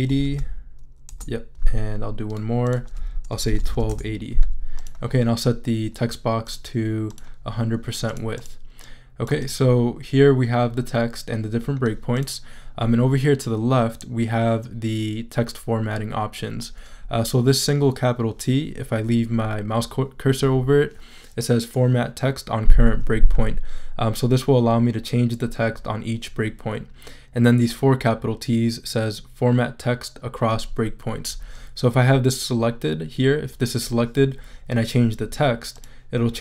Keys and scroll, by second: 0.0-0.8 typing, 1.1 Return, 3.2-4.2 typing.